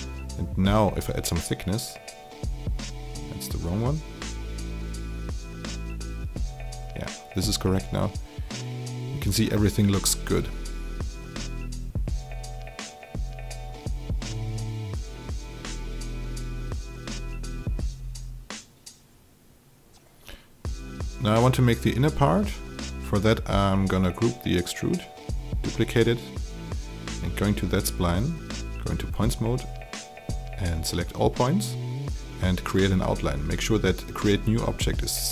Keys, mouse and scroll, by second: 4.2 KP_0, 4.4 Return, 6.4-10.0 drag, 10.4 alt+click, 12.4 click, 13.8 alt+click, 14.5 alt+click, 17.6 alt+middle click, 18.0 alt+right click, 18.7 alt+middle click, 21.3 click, 23.0 alt+g, 23.7 click, 24.9 ctrl+click, 26.3 click, 29.0 alt+right click, 29.7 alt+click, 31.5 ctrl+a, 32.6 right click, 34.3-35.3 drag.